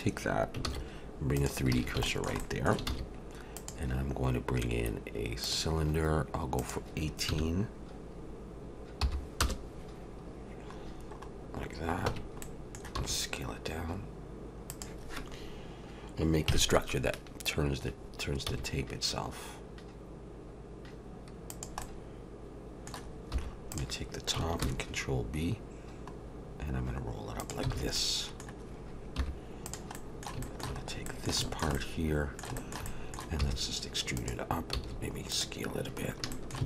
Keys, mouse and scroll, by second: 0.6 shift+s, 1.7 alt+a, 2.1 shift+middle click, 2.4 middle click, 2.9 shift+a, 6.6 click, 10.8-12.1 scroll down 5, 12.1 Tab, 12.4 middle click, 13.0 s, 16.5 KP_Decimal, 18.5 s, 21.8 middle click, 23.3 3, 23.7 click, 24.6 ctrl+b, 27.7 alt+a, 28.0 middle click, 29.2 3, 29.7 click, 29.9 middle click, 30.4 shift+middle click, 30.8 scroll up 2, 31.1 middle click, 31.4 shift+middle click, 31.7 middle click, 32.6 shift+middle click, 32.8 middle click, 33.4 e, 34.7 s, 36.0-36.3 scroll up 3, 36.3 shift+middle click.